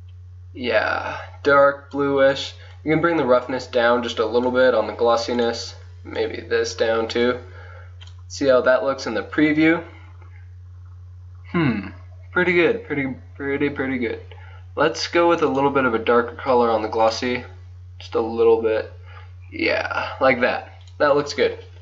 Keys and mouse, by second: 2.8-4.6 drag, 4.6 middle click, 5.4-7.0 drag, 7.2-8.2 middle drag, 9.8-15.6 middle drag, 15.6-17.4 drag, 19.3-20.9 middle drag, 20.9-21.8 drag.